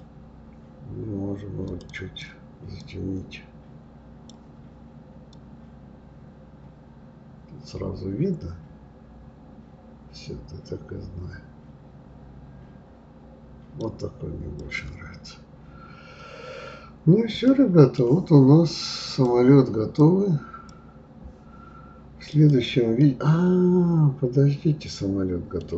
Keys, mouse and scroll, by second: 1.8-4.9 drag, 14.6 click, 15.7-16.0 scroll down 3, 16.0-17.0 scroll up 5, 17.0 scroll down 2, 17.5-19.1 middle drag, 19.1-22.1 drag, 22.3 click, 23.0-25.7 middle drag.